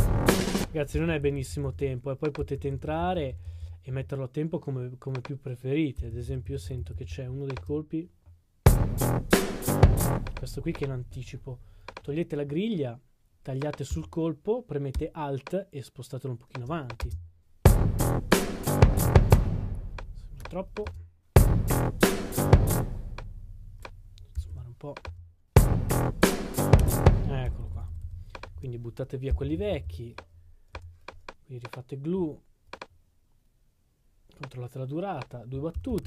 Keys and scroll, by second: 0.9-3.3 typing, 4.7 typing, 6.2-7.3 typing, 8.7 typing, 13.9 s, 14.7 s, 35.7 super+d.